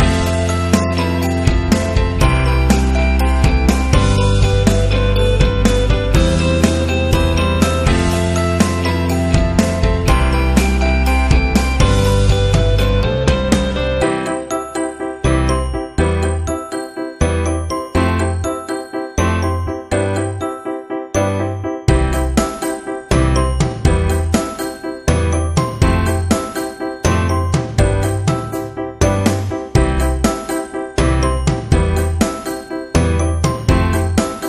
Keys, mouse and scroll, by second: 1.3 click, 2.2 click, 3.2 click, 5.1 alt+shift+click, 6.5-8.9 drag, 10.4-11.1 typing, 10.4 click, 11.8 Up, 12.8 click, 13.7 click, 14.0 Right, 16.4 Down, 17.3 click, 17.8 click, 18.6 space, 19.1 click, 19.8 right click, 19.9-20.6 typing, 20.4 right click, 21.3 click, 22.6 alt+click, 25.6 click, 27.2 click, 27.5 Left, 29.3 alt+shift+click, 31.1 click, 32.1 click, 32.5 Left, 34.3 click, 34.4 click.